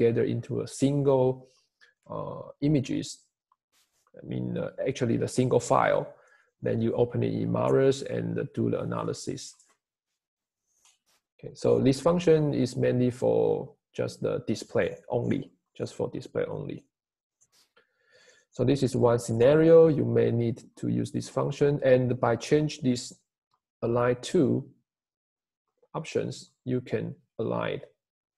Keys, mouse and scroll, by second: 28.0 Escape.